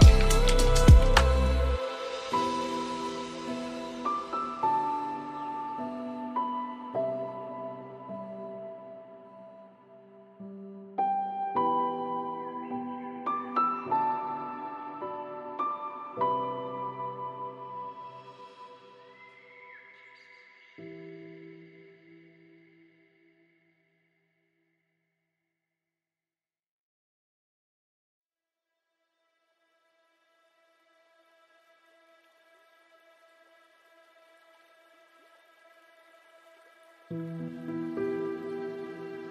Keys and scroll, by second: 13.4 ctrl+space.